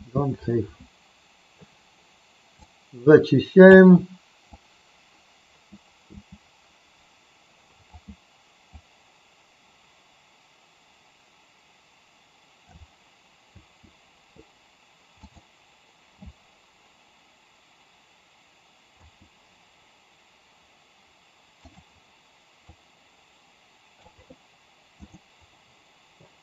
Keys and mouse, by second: 2.7-3.8 drag, 4.4-7.9 drag, 8.7-12.7 drag, 13.5 space, 15.1 click, 19.0 space, 21.7 click, 22.7-24.0 drag.